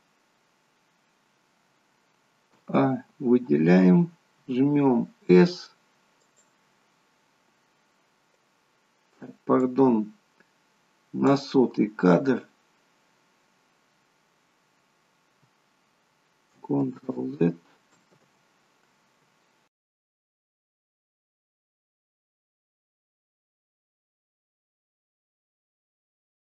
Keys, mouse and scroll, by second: 2.5 a, 4.5 s, 9.7 click, 17.3 ctrl+z, 18.5 ctrl+z, 20.3 click, 21.4 middle click, 23.0 middle click, 23.7-26.4 typing.